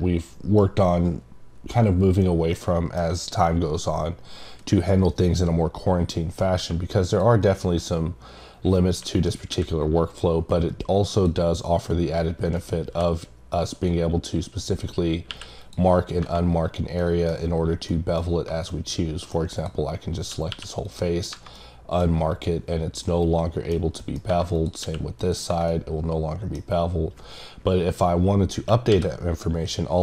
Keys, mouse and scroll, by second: 2.5 middle click, 7.1 click, 8.1-9.1 scroll down 1, 9.1 click, 11.1 click, 12.5 right click, 13.7 click, 15.6 click, 17.0 middle click, 17.9 middle click, 18.7 middle click, 19.5 click, 20.9 click, 21.5 middle click, 23.0 middle click, 24.0 middle click, 24.5 click, 25.2 click, 25.7 middle click.